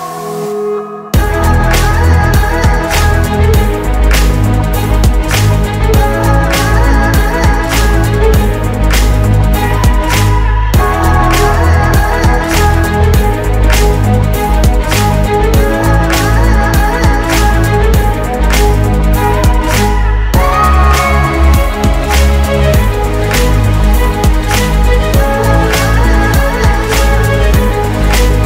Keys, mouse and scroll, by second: 0.2 typing, 4.4-5.2 typing, 12.1 shift+Right, 13.4 ctrl+click, 13.9 shift+Right, 14.3 ctrl+click, 14.5 shift+Right, 14.8 ctrl+click, 14.9 shift+Right, 15.2 ctrl+click, 15.4 shift+Right, 15.7 ctrl+click, 15.9 shift+Right, 21.7 typing, 25.2-26.0 typing.